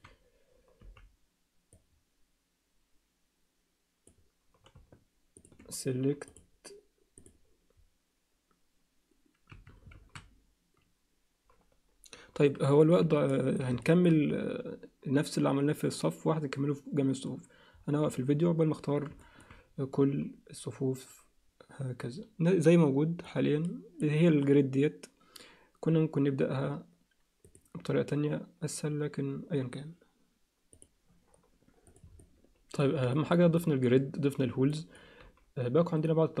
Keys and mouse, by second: 0.8 b, 6.3-7.4 drag, 9.5 a, 13.2 alt+shift+middle click, 13.8 ctrl+alt+middle click, 19.2 alt+shift+middle click, 27.4 click, 30.9 Tab, 32.2 alt+middle click, 33.1 alt+shift+middle click, 33.6 alt+middle click, 34.7 alt+middle click.